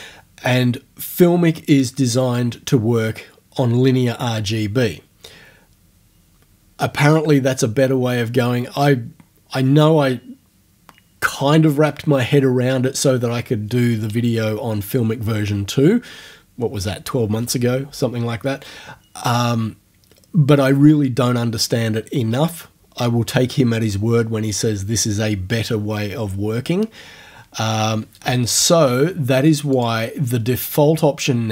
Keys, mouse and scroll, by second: 29.8 click.